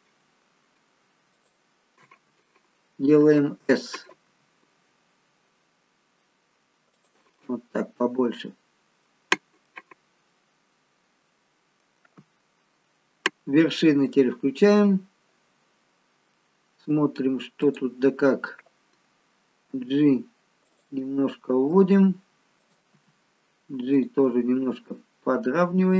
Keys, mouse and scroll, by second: 1.4 alt+shift+click, 4.3 s, 7.4 middle click, 10.7 middle click, 12.3 scroll up 2, 14.1 click, 16.4 middle click, 17.7 click, 19.9 g, 21.1 middle click, 22.7 click, 23.0 g, 24.3 middle click.